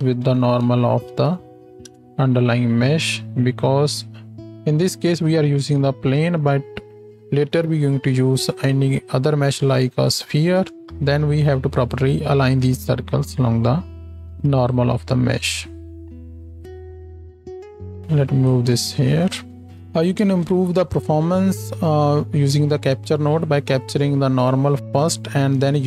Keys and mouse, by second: 1.3 Down, 4.1-14.6 drag, 14.6 middle click, 14.7 click, 15.4-20.0 middle drag, 20.3 ctrl+space.